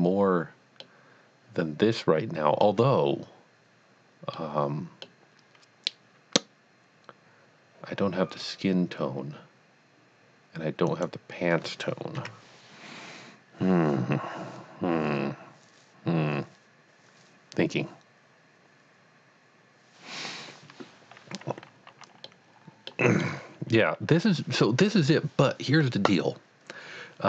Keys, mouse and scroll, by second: 0.8-1.8 middle drag, 2.0 middle click, 4.3 middle click, 10.9 middle click, 11.0-11.4 drag, 12.2 KP_1, 22.2 KP_1, 22.6 middle click, 23.6 middle click.